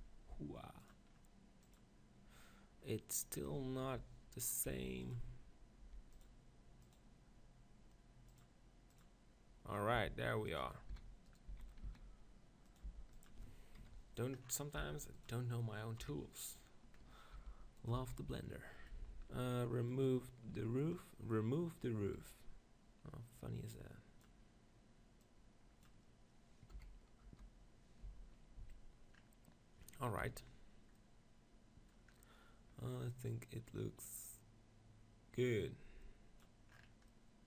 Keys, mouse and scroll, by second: 0.9-3.4 drag, 4.5 middle click, 4.7 g, 5.1-10.1 drag, 5.8 g, 10.0-12.9 typing, 10.1 middle click, 10.6-11.9 drag, 11.4 right click, 11.7 middle click, 12.7 right click, 14.6 middle click, 15.0 g, 15.2-17.0 drag, 16.0 KP_7, 17.0 middle click, 17.4 g, 17.9 click, 17.9 z, 25.2-26.7 drag, 26.7 KP_1, 27.4 KP_0, 28.0 z, 28.6 z, 29.1-30.8 middle drag, 30.4 KP_7, 31.0-34.0 middle drag, 34.0-35.9 drag, 36.7-37.4 middle drag.